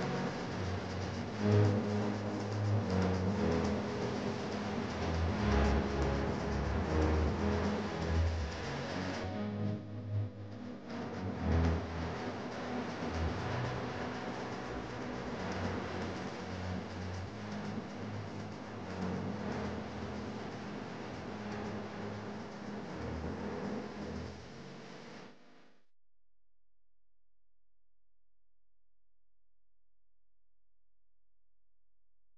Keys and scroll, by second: 16.2 ctrl+KP_0.